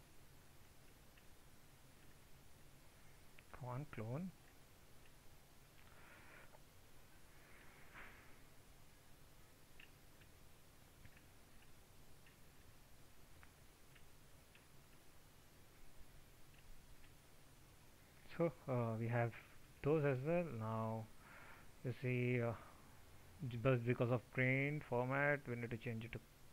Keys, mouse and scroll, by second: 0.5 ctrl+z.